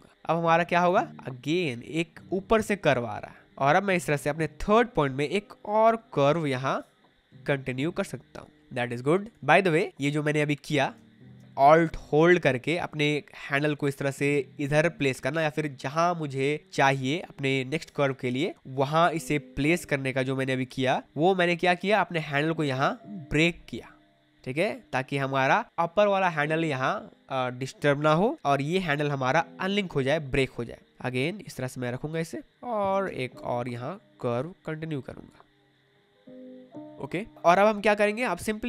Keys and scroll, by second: 0.3 space, 10.9 space, 32.9 space, 36.8 space.